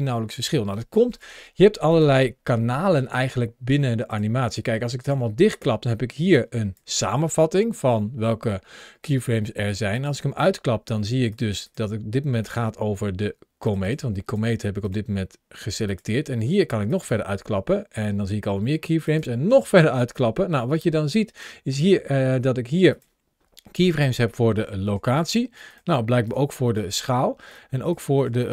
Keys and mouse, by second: 1.8 click, 3.9 click, 5.3 click, 6.2-6.6 drag, 9.8 click, 14.7 click, 15.8 click, 16.7 click, 19.0 click, 19.9 click, 22.7 click, 25.5 click, 27.3 click, 28.4 click.